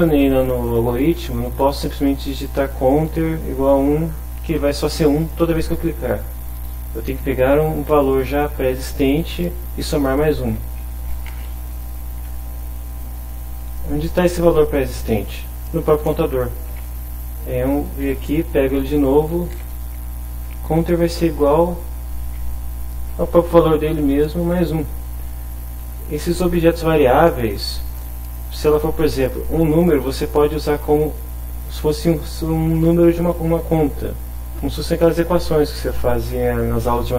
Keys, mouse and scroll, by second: 9.9 Left, 11.0 shift+space, 11.1 shift+=, 11.3 shift+space, 11.7 shift+Left, 13.7 Right, 16.1 shift+Home, 17.0 ctrl+shift+Right, 19.2 Left, 19.5 ctrl+v, 21.4 Down, 22.1 Up.